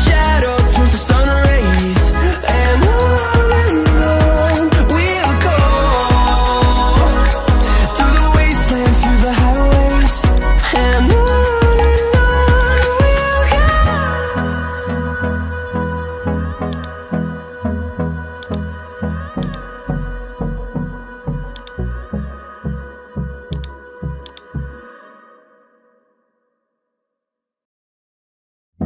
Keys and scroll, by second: 3.8 ctrl+t, 6.2 Return, 28.4 ctrl+t.